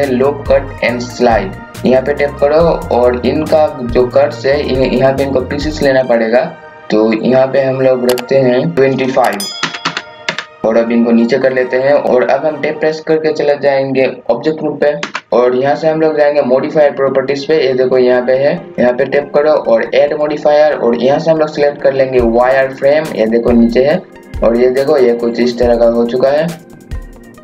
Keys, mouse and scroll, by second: 1.7-8.3 drag, 8.7 click, 9.6 KP_2, 9.8 KP_5, 10.6 scroll up 1, 10.8 click, 11.6 scroll down 1, 12.0 scroll up 1, 15.0 Tab, 18.7 click, 24.6 scroll down 1, 25.2-25.5 scroll up 1, 26.8 KP_6, 27.1 click.